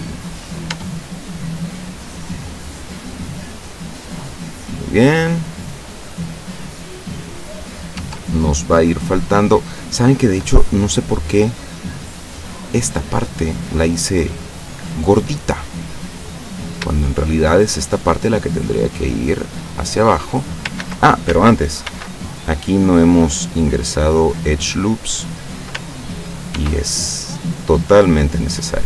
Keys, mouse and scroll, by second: 0.7 Tab, 1.0 click, 1.1-3.2 middle drag, 3.2-3.7 scroll down 1, 3.7-6.2 middle drag, 6.2 scroll up 1, 6.3-6.7 scroll down 1, 6.7-7.9 middle drag, 8.0 Tab, 8.6 middle click, 9.4 middle click, 10.0 scroll up 1, 12.0 right click, 12.8-14.0 drag, 14.3 click, 15.7 click, 17.0 shift+right click, 17.6 shift+right click, 18.5-20.0 drag, 20.0 middle click, 20.8 ctrl+z, 20.8 ctrl+click, 21.9 ctrl+r, 23.3 click, 25.3 click, 26.6 ctrl+r, 28.2 click.